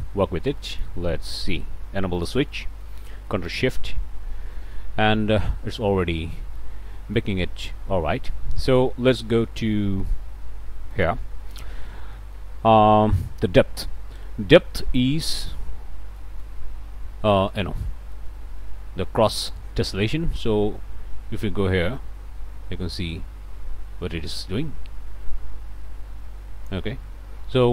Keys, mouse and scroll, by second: 0.6 middle click, 1.3 middle click, 2.2 click, 2.6 middle click, 3.5 ctrl+shift+click, 5.5 scroll up 1, 6.6 middle click, 7.5-7.8 scroll up 1, 8.6 middle click, 8.8 click, 9.1 middle click, 9.3 middle click, 10.0 click, 10.2 middle click, 11.7 middle click, 12.1 click, 14.5 scroll down 1, 14.9 click, 15.8 scroll up 1, 16.1 click, 17.8 scroll down 1, 18.1 click, 19.5-26.9 drag.